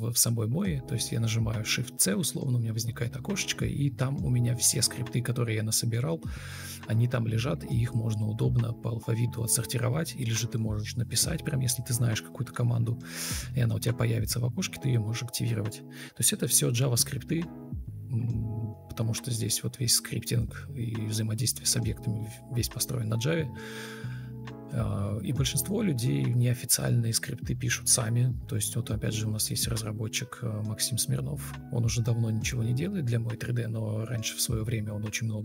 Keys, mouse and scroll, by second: 4.9 Escape, 6.4 Escape, 11.7 shift+Left, 12.3 ctrl+c, 12.3 ctrl+z, 14.7 ctrl+v, 18.8 ctrl+shift+space, 21.2 ctrl+space, 22.1 ctrl+space, 22.4 ctrl+space, 24.5 Delete, 25.5 Delete, 27.6 alt+e, 31.8 ctrl+space, 33.6 alt+scroll up 1, 34.2-35.3 typing.